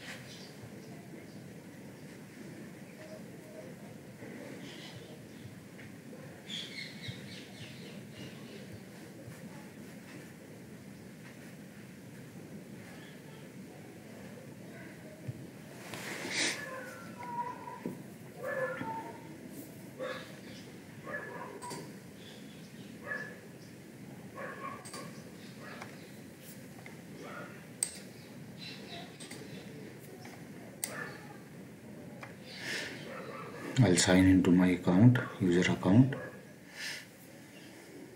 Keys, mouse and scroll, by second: 27.8 click, 30.8 click.